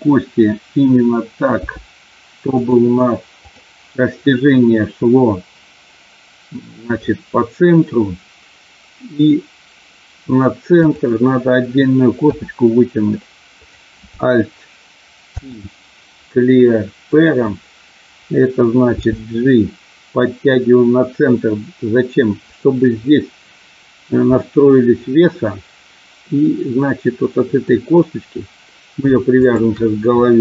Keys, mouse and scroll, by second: 1.6 g, 3.3 click, 10.9 click, 12.3 e, 15.3 alt+p, 18.8 g, 22.4 click, 24.3-27.6 middle drag, 29.3 shift+click.